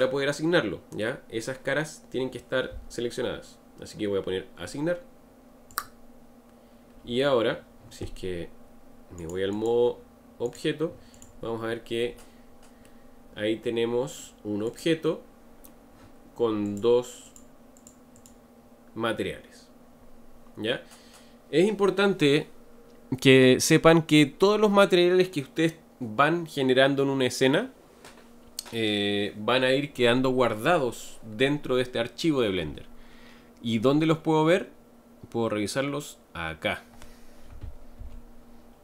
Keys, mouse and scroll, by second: 5.7-8.7 drag, 9.2 click, 9.5-11.3 drag, 11.7-12.9 scroll down 7, 12.9-14.7 middle drag, 14.7 click, 16.7 click, 17.3 click, 17.8 click, 18.2 click.